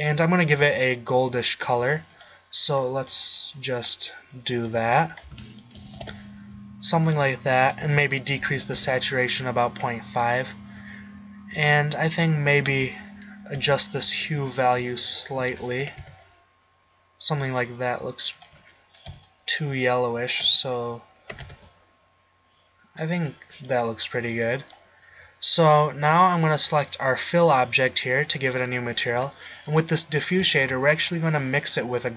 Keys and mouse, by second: 11.6-13.4 middle drag, 25.2-26.7 middle drag, 29.2 g, 30.9 shift+a.